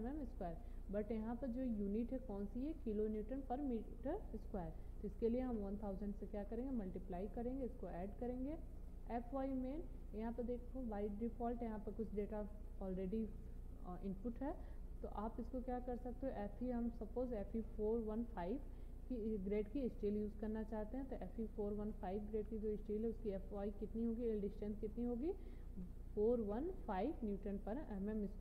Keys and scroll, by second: 5.0 0, 25.7 4, 26.5 1, 27.1 5.